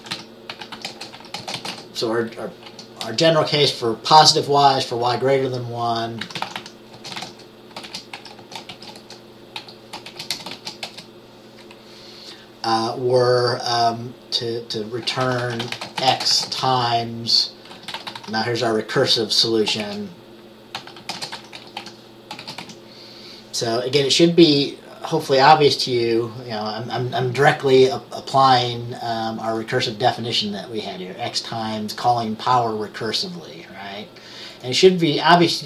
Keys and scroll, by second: 0.0-3.6 typing, 6.2-11.1 typing, 15.1-18.8 typing, 19.9-22.7 typing.